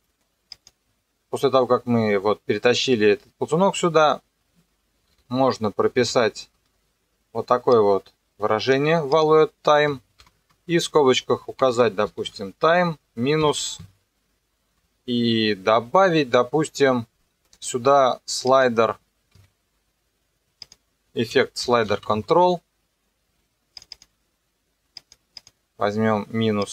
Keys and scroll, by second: 6.1 ctrl+v, 10.2 shift+9, 11.3-12.7 typing, 13.4 KP_Subtract, 19.4 Escape, 21.1-22.3 typing, 23.4 r.